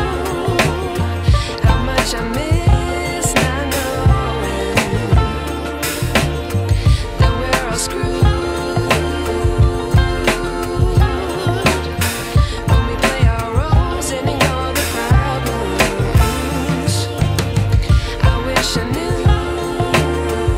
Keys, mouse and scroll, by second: 4.5-5.1 alt+scroll up 2, 5.5 ctrl+t, 6.4 click, 10.6 ctrl+shift+t, 12.0 ctrl+t, 13.0 click, 15.9-16.3 alt+scroll down 2, 16.7 alt+Num_Lock, 16.9-18.1 alt+scroll up 2, 18.1 click.